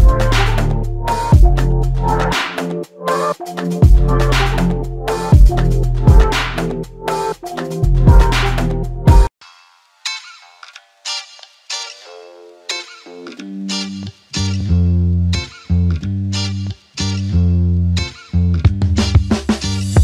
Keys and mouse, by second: 1.0 double click, 11.2 double click, 18.5 alt+click.